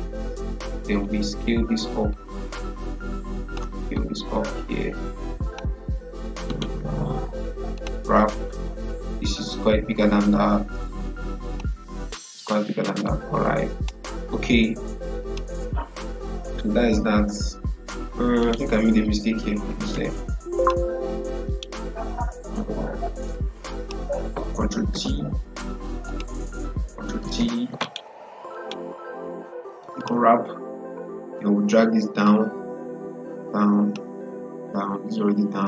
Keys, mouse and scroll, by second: 6.4 right click, 7.6-15.1 drag, 18.3 right click, 19.8 ctrl+z, 20.5 click, 21.4 right click, 23.1 click, 24.8 ctrl+t, 26.0 click, 27.1 ctrl+t, 27.7 right click, 29.9-35.6 drag.